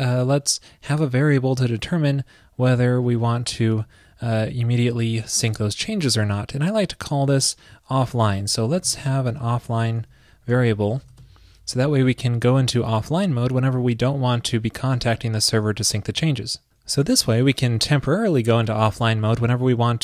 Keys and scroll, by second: 11.0 super+Left, 11.9 super+].